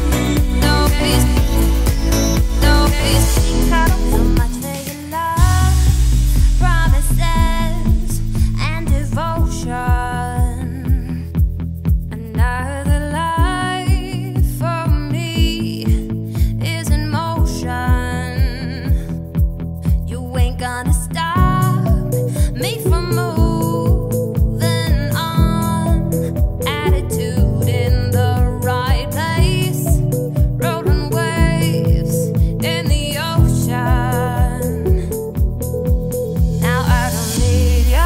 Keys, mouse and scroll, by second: 0.9 Tab, 1.2-1.7 shift+middle drag, 1.7 g, 3.6 g, 8.3-10.9 middle drag, 10.9 shift+click, 11.8 ctrl+KP_Subtract, 12.6-13.3 scroll up 1, 13.6 click, 14.5 Tab, 16.7 ctrl+z, 16.9 ctrl+z, 17.3 ctrl+z, 18.1 click, 18.6-19.0 scroll down 1, 19.0 shift+d, 19.9 scroll down 1, 20.0-20.4 middle drag, 20.4 shift+click, 21.3 ctrl+KP_Subtract, 22.1-22.8 scroll up 4, 22.8 click, 23.3 Tab, 23.7 scroll down 2, 23.9 a, 24.9-26.0 shift+middle drag, 26.0 shift+d, 30.6 x, 32.8 click, 33.2 Tab, 33.5 click, 33.8-36.1 right drag, 36.1 click, 36.8 click, 37.8-38.0 drag.